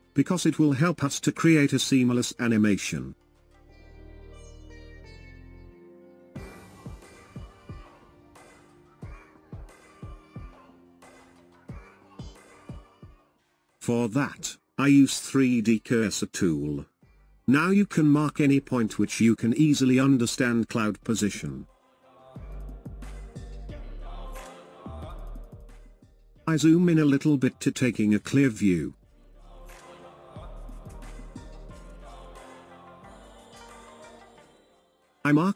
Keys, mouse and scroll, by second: 2.6-5.0 scroll up 1, 7.8 scroll up 1, 8.6-8.9 scroll up 2, 9.6-10.3 scroll down 6, 11.4-11.7 scroll up 2, 15.2-18.3 drag, 19.5 click, 26.7 scroll up 4.